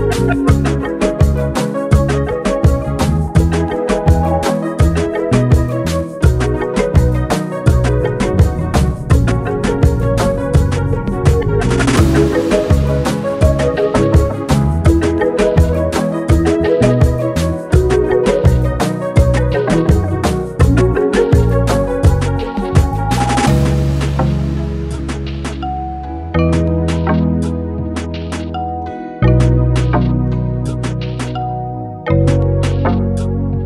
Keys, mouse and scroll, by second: 0.9 ctrl+space, 1.0-1.5 ctrl+drag, 2.9-3.3 ctrl+click, 3.1 ctrl+space, 3.3-3.8 click, 3.7 space, 3.9 click, 4.0-4.4 space, 4.7 click, 9.0 click, 9.6 Return, 10.7 click, 11.3 ctrl+space, 11.4-13.0 ctrl+click, 13.2 space, 13.2 click, 13.5-14.8 space, 16.0-17.6 drag, 18.0-18.5 click, 18.9-19.5 ctrl+space, 20.5-22.5 drag, 23.7 shift+Left, 25.0 shift+Right, 25.0 Left, 25.6 Up, 27.2 Up, 28.1 ctrl+space, 28.3-28.7 ctrl+click, 28.5 ctrl+space, 29.6 click, 31.0 ctrl+space, 31.1 ctrl+click, 31.3 ctrl+space, 31.9 ctrl+space, 32.0 ctrl+click, 32.2 ctrl+space, 33.4 click.